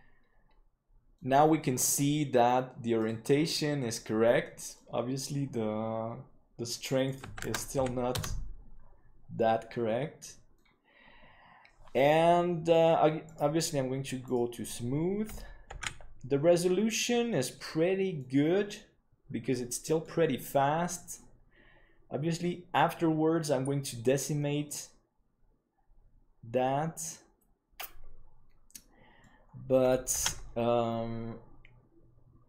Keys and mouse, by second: 3.9 middle click, 7.1-8.7 drag, 10.0 middle click, 13.6-14.9 drag, 16.1 ctrl+s, 17.3-18.1 middle drag, 19.5-20.0 middle drag, 21.1-23.4 middle drag, 24.6-29.2 middle drag, 30.6 ctrl+s.